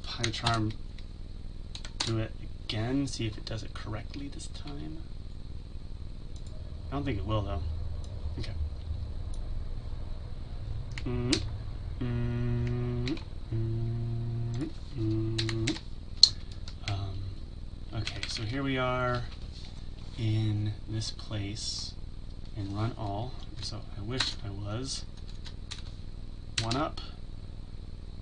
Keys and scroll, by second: 0.4 alt+x, 11.3 ctrl+x, 13.1 ctrl+z, 15.7 ctrl+v.